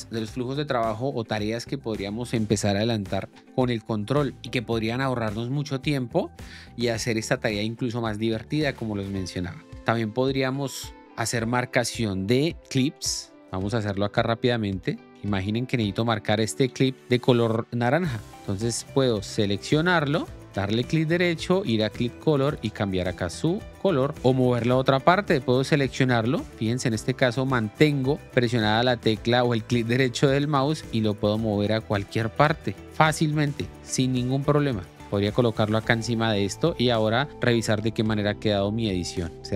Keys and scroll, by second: 12.8 Up, 14.1 Down, 15.1 Up, 15.6 Down, 15.8 Up, 16.1 Down, 16.6 Up, 16.7 Down, 18.0 Up, 19.6 k, 21.9 k, 37.5 l, 39.3 j.